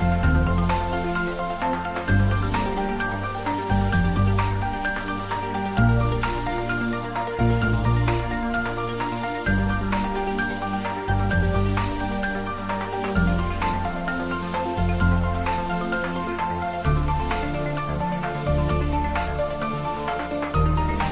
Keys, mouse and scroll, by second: 1.3 space, 5.0 space, 14.1 space, 14.3 middle click, 15.9 ctrl+middle click, 16.5-18.6 middle drag, 18.6 click.